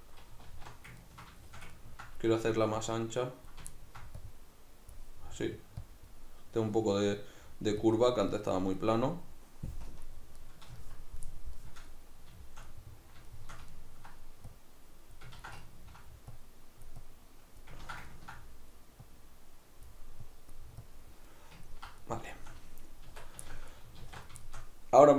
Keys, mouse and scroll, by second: 0.5 alt+q, 2.8 click, 3.7 ctrl+middle click, 4.2-8.8 drag, 8.8-14.5 middle drag, 9.8 KP_Decimal, 14.5-15.6 drag, 15.4 ctrl+z, 15.6 ctrl+middle click, 16.3-18.1 drag, 17.9 ctrl+z, 18.1-19.1 ctrl+middle drag, 19.1-21.3 drag, 21.3-25.1 middle drag, 23.1 Tab, 24.0 alt+q.